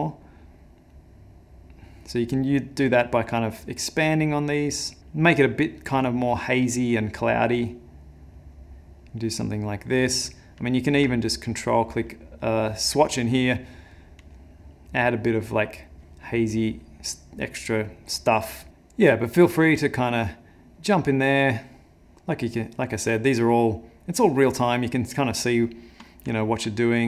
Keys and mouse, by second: 0.9 click, 2.8 click, 4.4 click, 5.0 click, 6.4 middle click, 7.5 click, 9.0 click, 10.8 ctrl+click, 11.1 ctrl+click, 11.6 click, 12.4 click, 13.8 ctrl+click, 16.8 click, 19.3 click, 21.7 click, 22.9 click, 23.9 click, 25.7 middle click, 26.4 ctrl+middle click, 26.8 middle click.